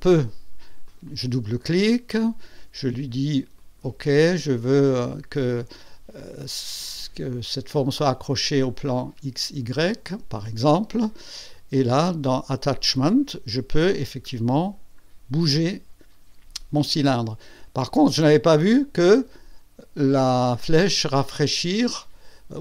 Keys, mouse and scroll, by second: 0.8 click, 3.6 click, 9.7 click, 11.3 click, 11.7 click, 13.7 click, 14.2-14.5 scroll down 1, 14.7 scroll down 2.